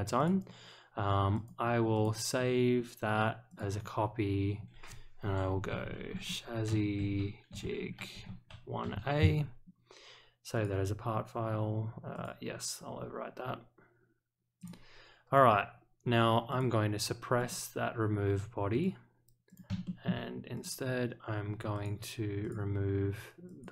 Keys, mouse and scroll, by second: 0.1 click, 1.3 click, 1.9 click, 3.5 click, 10.5 click, 12.1 click, 14.6 click, 16.5 click, 17.3 click, 18.7 click, 19.4 click, 19.8 shift+middle click, 20.5 click, 21.7 click, 22.4 click, 23.4 click.